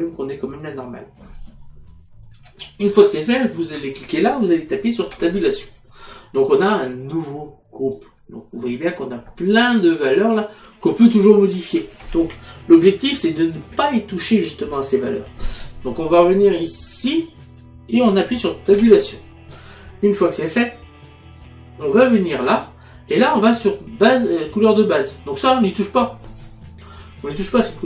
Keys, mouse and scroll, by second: 3.6 click, 5.1 Tab, 17.0 click, 18.8 Tab, 21.4 click, 23.3 click.